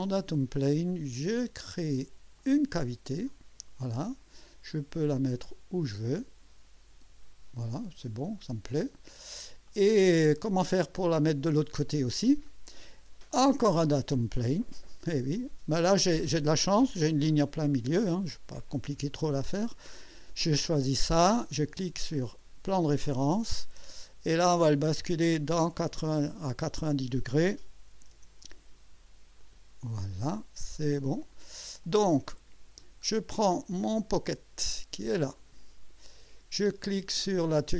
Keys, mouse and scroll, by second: 2.4 click, 3.2 click, 4.7 scroll up 1, 5.4 scroll up 2, 6.8 scroll up 2, 8.7 click, 9.7 click, 10.7 click, 11.5 click, 12.5-13.9 drag, 19.5 click, 22.0 click, 23.8 click, 26.6 click, 27.6-28.6 typing, 29.4 click, 31.2 click, 31.8 click, 33.8-34.3 drag, 35.3 click.